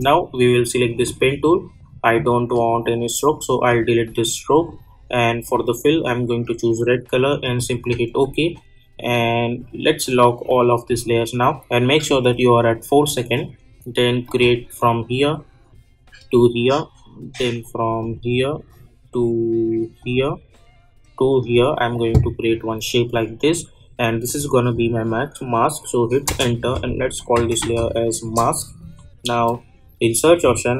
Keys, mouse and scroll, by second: 8.2-8.6 alt+scroll up 1, 10.4-14.2 drag, 24.2 click, 26.2 Return, 26.9-28.2 typing, 30.1 click.